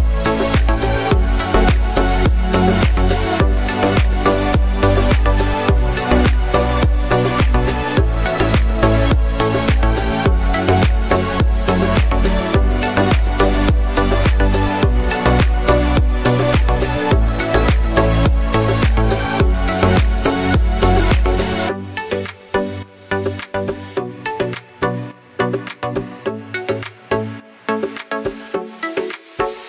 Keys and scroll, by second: 5.8-8.4 typing, 9.1 Return.